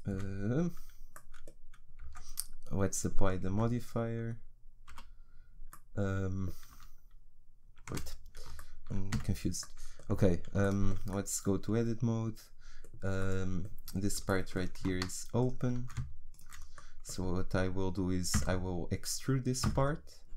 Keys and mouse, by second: 0.1 z, 2.1 Tab, 3.5 Tab, 4.9 a, 7.9 Tab, 9.1 z, 10.1 Tab, 15.4-18.3 right drag, 18.3 e.